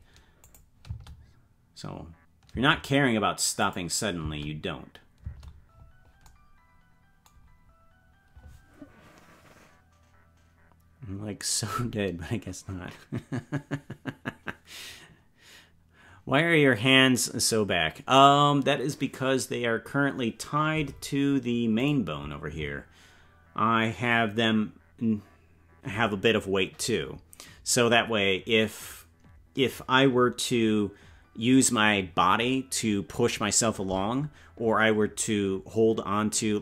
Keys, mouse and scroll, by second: 0.4 click, 0.8 space, 3.6 click, 4.2 space, 6.2 space, 21.9 right click.